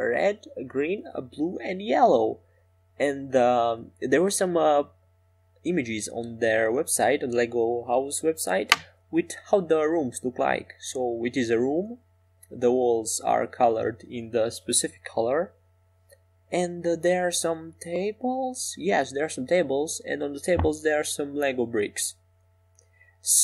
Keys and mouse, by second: 3.6-8.2 drag, 9.4 e, 13.1-18.8 right drag, 13.6 click, 16.5 f, 18.8 e, 20.0 s.